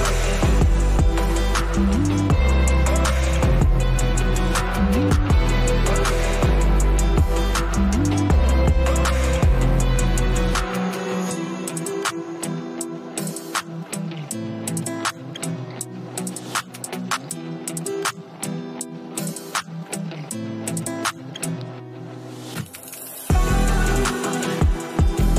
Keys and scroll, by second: 2.1 space, 5.1 space, 12.9 space.